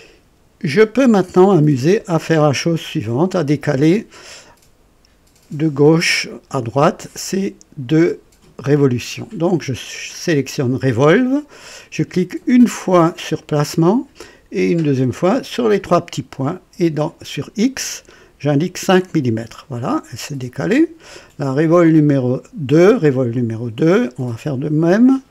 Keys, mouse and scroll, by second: 0.7 click, 13.3 click, 15.5 click, 17.0 click, 18.5 KP_5, 19.3 KP_Enter, 23.3 click, 24.9 click.